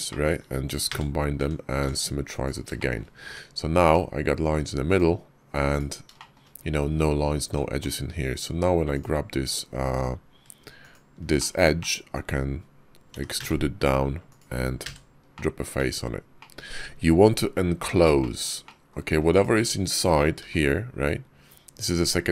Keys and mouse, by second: 0.7 f, 1.2 Tab, 1.7 alt+x, 2.3 click, 2.6 shift+click, 3.1 Tab, 3.7 Tab, 4.7 click, 6.0 shift+click, 7.3 Tab, 8.8 alt+click, 10.7 alt+shift+click, 11.2 shift+click, 11.6 middle click, 12.9 e, 14.7 f, 15.2 click, 15.6 Tab, 16.2 click, 18.0 shift+drag, 18.5-18.8 drag, 19.1 click, 20.2 g.